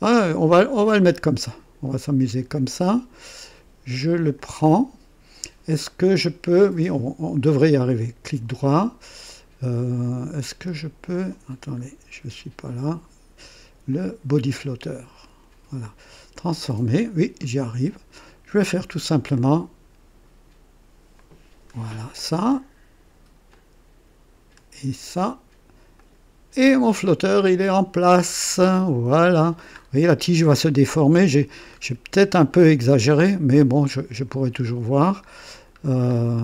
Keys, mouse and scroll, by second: 2.5 click, 4.3 click, 7.9 right click, 11.1 click, 11.8 scroll down 1, 13.9 click, 15.2 right click, 16.3 click, 17.4 scroll down 1, 19.3-21.8 drag, 22.1 right click, 23.5-25.3 drag, 26.0 click, 26.7 click, 27.4-29.6 drag, 29.7 scroll up 1, 31.7 scroll up 1, 33.7 middle click, 34.4-35.1 scroll down 2, 36.1 scroll down 1.